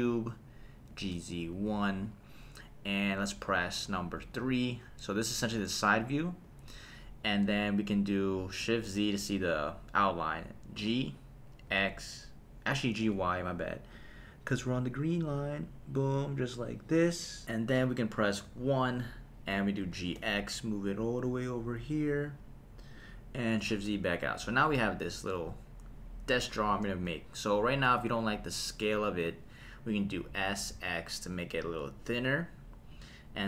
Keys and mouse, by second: 0.9 g, 1.1 z, 1.5 KP_1, 2.0 click, 4.2 KP_3, 6.4 KP_3, 9.0 shift+z, 10.8 g, 11.7 x, 13.0 y, 17.0 click, 18.5 KP_1, 19.8 g, 20.2 x, 22.9 click, 23.8 shift+z, 30.3 s, 30.7 x, 32.9 click.